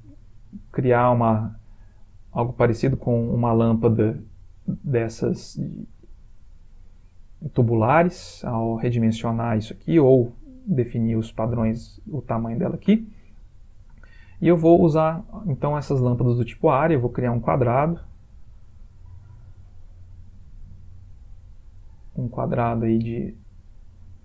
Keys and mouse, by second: 4.4 middle click, 5.6 shift+middle click, 6.0 middle click, 6.0 middle click, 6.3 middle click, 6.3 middle click, 6.5 middle click, 6.5 shift+middle click, 6.7 middle click, 9.4 middle click, 13.6 middle click, 14.2 shift+middle click, 15.0 middle click, 17.9 click, 20.6 click.